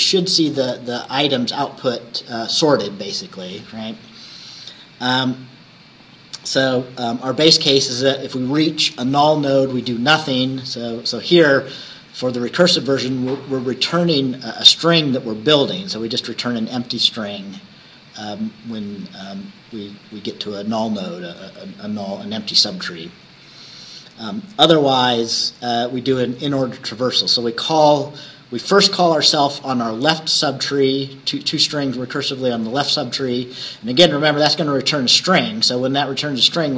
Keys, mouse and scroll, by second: 5.4 scroll up 1, 6.0 scroll up 1, 23.8 scroll down 2, 24.5 scroll down 2, 25.5 scroll up 2.